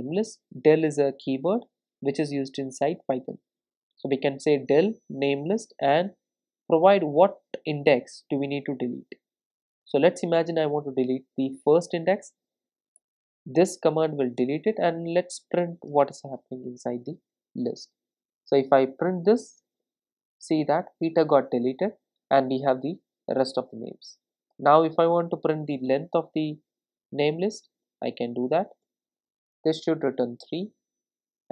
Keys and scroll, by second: 14.4 Return, 18.0 ctrl+r, 25.9 Return, 30.3 ctrl+r.